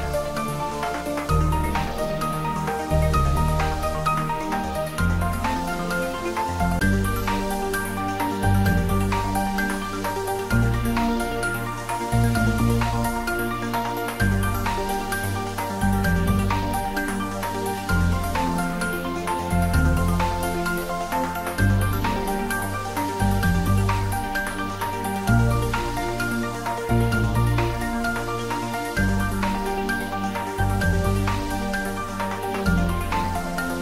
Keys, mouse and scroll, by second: 1.2 click, 1.6 scroll up 1, 2.0-2.9 middle click, 2.9 click, 5.3 shift+right click, 6.3 shift+a, 9.4 click, 12.4 click, 16.7 ctrl+z, 19.6 shift+click, 24.3 click, 25.2 scroll down 1, 26.3 r, 28.2 click, 28.6-29.2 scroll up 1, 29.3 ctrl+z, 29.9 scroll up 1, 32.2-32.8 middle drag.